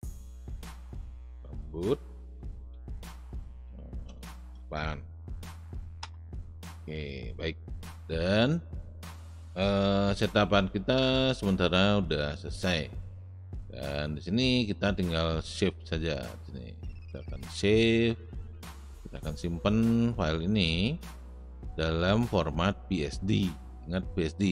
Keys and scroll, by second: 0.9-6.0 typing.